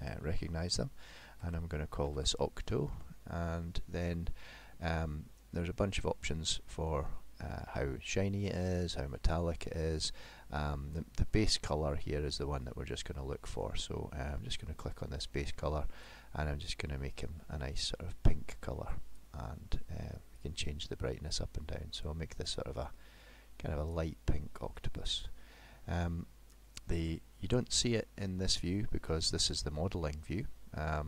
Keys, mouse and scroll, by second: 14.6 click, 26.5 middle click.